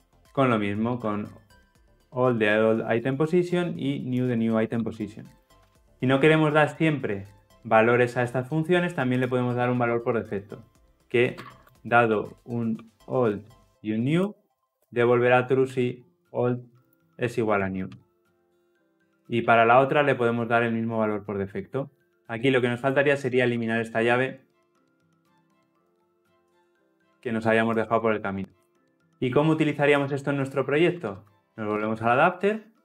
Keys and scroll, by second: 0.0 Return, 1.7 Escape, 4.7 ctrl+c, 5.7 ctrl+v, 18.3 Escape, 19.1 ctrl+alt+l, 19.3 ctrl+alt+o, 22.2 ctrl+alt+l, 26.6 ctrl+alt+l, 26.6 ctrl+alt+o.